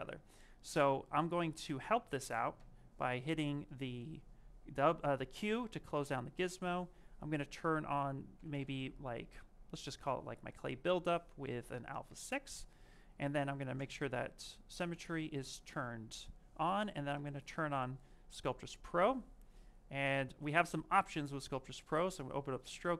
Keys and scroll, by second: 8.2-9.5 typing.